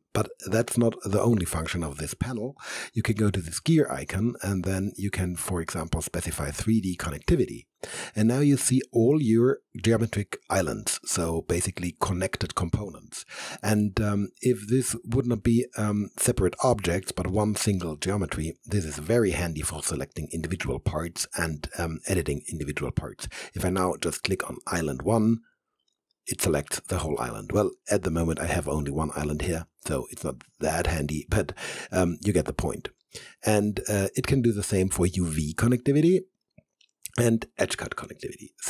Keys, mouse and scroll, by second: 3.1 click, 6.6 click, 14.4 click, 14.6 alt+right click, 15.8-18.1 alt+drag, 24.5 click, 33.5-38.6 drag.